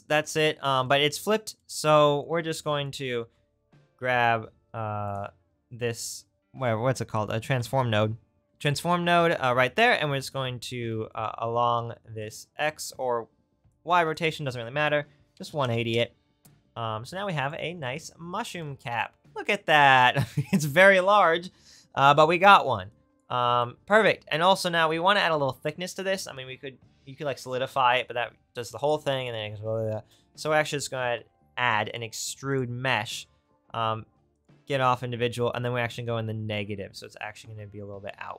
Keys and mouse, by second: 2.3-8.4 drag, 3.2 shift+a, 8.8-12.3 right drag, 12.3-19.3 middle drag, 28.9-32.2 drag, 30.0 shift+a, 32.2-34.4 right drag, 34.3 click, 35.7-38.3 drag.